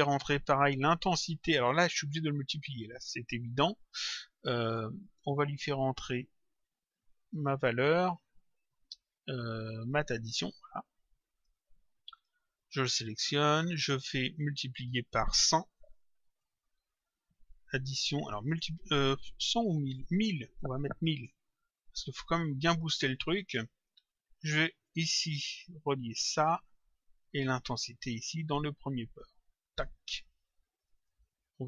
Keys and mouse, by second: 1.4 click, 10.2 click, 12.1 click, 13.5 click, 14.6 click, 16.5 click, 18.2 click, 19.8 click, 21.5 click, 22.9 click, 24.8 click, 28.2 click, 30.8 ctrl+click.